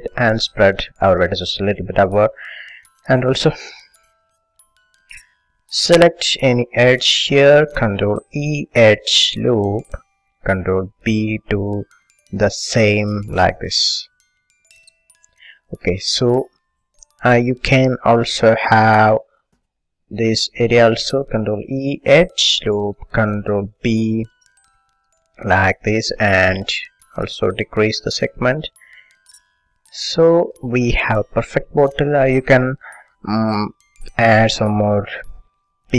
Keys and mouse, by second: 3.7 a, 7.3-9.1 drag, 8.2 ctrl+e, 11.2 ctrl+b, 15.4-16.9 drag, 16.9 middle click, 18.4 a, 20.2-21.3 drag, 21.3 ctrl+e, 23.8 ctrl+b, 26.0-28.0 drag, 28.0-29.2 middle drag, 29.2 click, 30.4 a, 31.0 middle click, 32.4-35.9 middle drag.